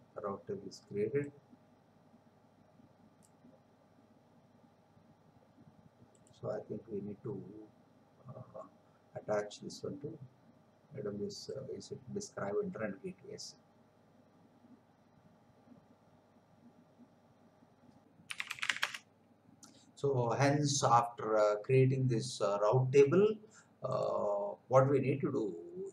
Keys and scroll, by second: 18.0 Return.